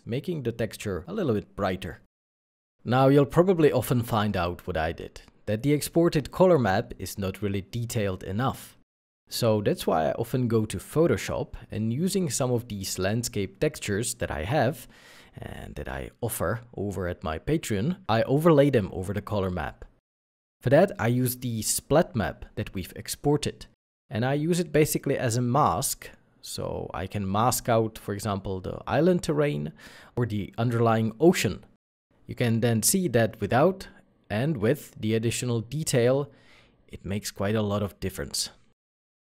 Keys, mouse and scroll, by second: 2.7 alt+F9, 3.9-4.6 scroll up 1, 18.4 space, 19.6 click, 24.1 w, 26.2 ctrl+d, 28.1 shift+click, 29.0 shift+w, 31.4 ctrl+d, 31.9 middle click, 34.9-35.5 alt+scroll up 1, 36.0-36.6 alt+scroll up 1, 37.2 ctrl+s, 37.7 scroll up 1.